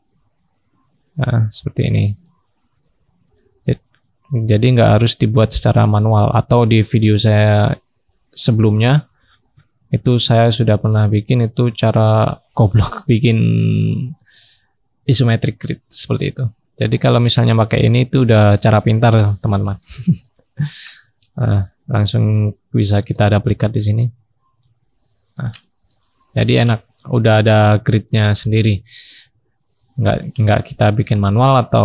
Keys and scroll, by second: 6.8-7.5 scroll up 1, 7.5-8.9 scroll down 1, 9.2-12.6 scroll down 1, 12.6-13.7 scroll up 1, 20.4-22.5 scroll up 1, 23.2-24.8 scroll up 1, 24.8-27.1 scroll up 1, 27.1-27.8 scroll down 1, 27.8-29.2 scroll up 1.